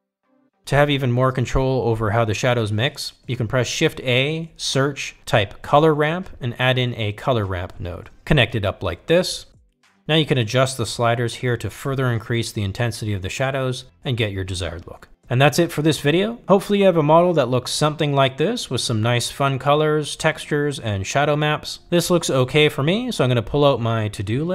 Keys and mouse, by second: 1.3-3.4 drag, 5.7 click, 6.2 shift+a, 7.8 r, 11.3-15.4 drag, 17.4-19.4 drag, 20.4-23.3 drag.